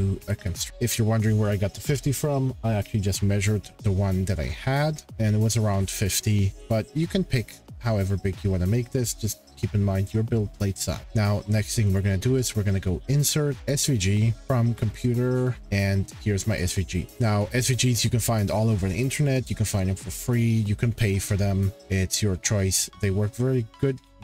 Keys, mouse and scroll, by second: 0.2 x, 0.7 scroll, 5.0 scroll, 5.9-6.4 scroll, 11.9 click, 13.7 click, 14.4 click, 16.6 click, 16.7 click, 18.5 click, 23.8-24.2 scroll.